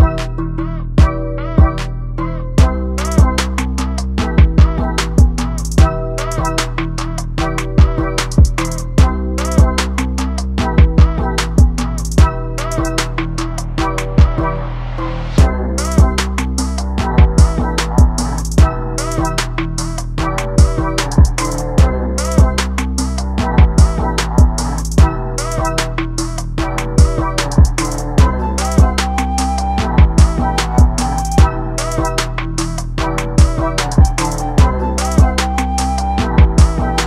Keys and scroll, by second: 24.3 ctrl+t, 33.9 ctrl+t.